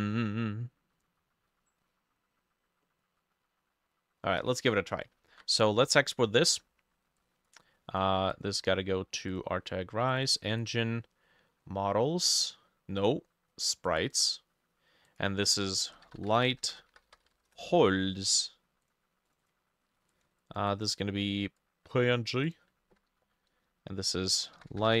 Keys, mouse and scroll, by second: 5.2 ctrl+alt+click, 5.2 ctrl+alt+middle click, 5.3 ctrl+alt+e, 8.6 double click, 10.3 double click, 14.2 double click, 15.7-17.9 typing, 15.9-22.7 drag, 16.5 shift+middle click, 23.2-25.0 ctrl+drag, 24.2-25.0 typing.